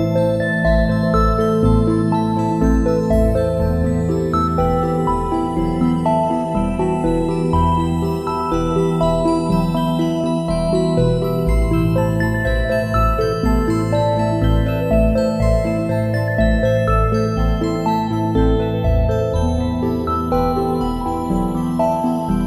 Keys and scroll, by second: 2.0-4.2 typing, 9.6 a, 12.1 space, 15.2 space, 19.5 `, 19.6 space, 21.3 space.